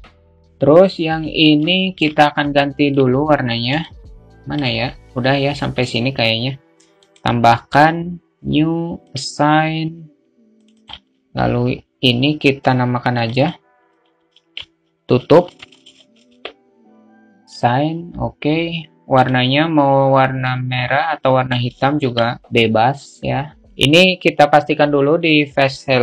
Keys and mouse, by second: 0.2 alt+shift+middle click, 1.5 alt+shift+middle click, 2.3 alt+middle click, 3.5 alt+shift+middle click, 7.3-8.1 drag, 8.7-9.2 drag, 10.6 click, 12.8-16.7 drag, 17.4 click, 22.0 Tab.